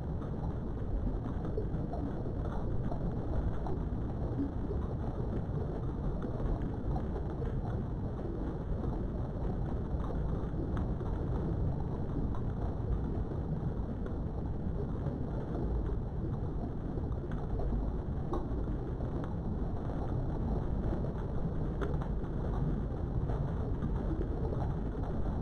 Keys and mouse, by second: 0.1 click, 0.8 click, 1.2 g, 2.7 click, 4.0 a, 5.0 s, 6.1 right click, 6.3 s, 6.6 z, 8.7 right click, 9.7 s, 10.4 shift+x, 11.2 right click, 11.8 s, 12.5 shift+y, 18.9 click, 21.0 ctrl+r.